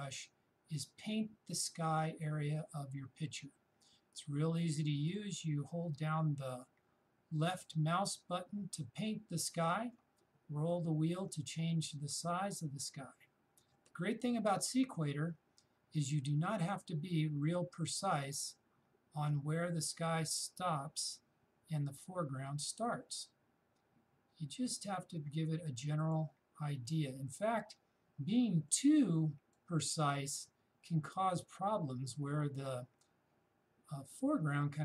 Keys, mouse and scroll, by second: 0.3-10.3 shift+drag, 10.5-10.9 shift+scroll down 1, 10.9-12.1 shift+scroll up 1, 12.4-22.4 shift+drag, 26.6-28.1 shift+scroll down 1, 28.7-30.0 shift+drag, 30.0-32.0 shift+scroll down 1, 32.0-34.8 shift+drag.